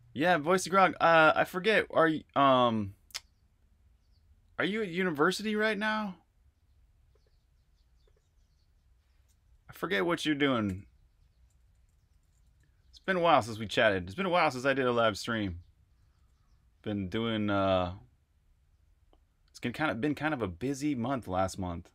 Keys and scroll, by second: 10.4-15.8 typing, 18.1 typing.